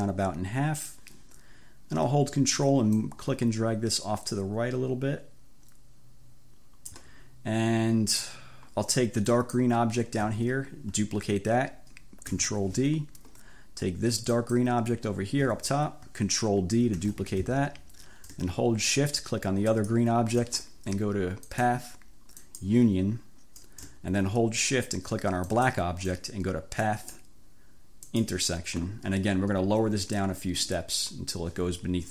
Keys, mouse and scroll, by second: 3.1-7.2 ctrl+drag, 9.3 click, 12.4 ctrl+d, 14.4 click, 17.0 ctrl+d, 19.8 shift+click, 21.6 click, 22.5 click, 25.5 shift+click, 26.9 click, 28.2 scroll up 2.